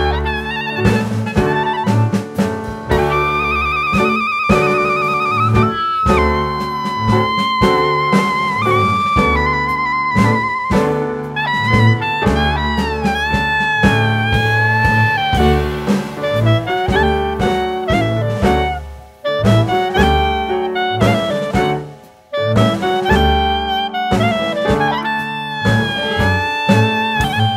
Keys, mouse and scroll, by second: 0.0 click, 1.1 middle click, 1.5-2.5 scroll down 2, 2.5 middle click, 3.0 click, 3.4 middle click, 5.9 Tab, 6.6 Tab, 7.6 shift+a, 10.4 middle click, 11.5 scroll down 3, 11.6 middle click, 12.8 s, 14.4 click, 15.4-15.8 scroll up 2, 16.6 click, 16.9-17.9 scroll up 3, 17.9 click, 19.1 click, 20.5 shift+middle click, 20.5-21.3 shift+scroll up 3, 21.3 click, 22.2 scroll up 1, 22.7 click, 25.0 scroll up 2, 25.9 click.